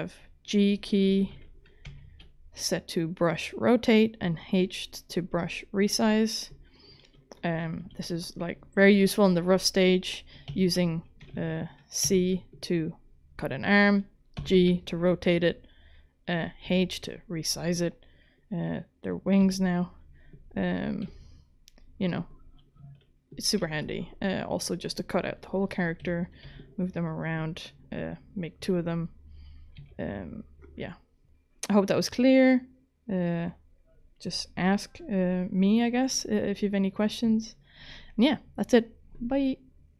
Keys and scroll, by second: 1.2 ctrl+k, 1.9 g, 7.8 ctrl+z, 10.5 c, 11.3 ctrl+z, 12.0 c, 14.4 g, 16.6 h, 19.4 g, 21.0 g, 23.6 c, 26.0 g, 26.4 h, 28.6 f, 29.8 c.